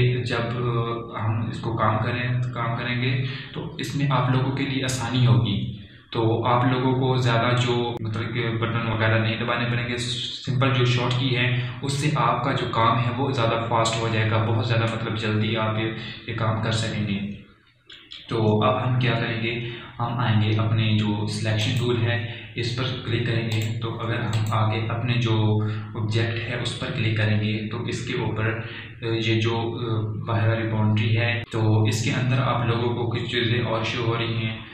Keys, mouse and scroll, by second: 24.4 click, 31.4 click, 33.7-34.7 scroll up 1.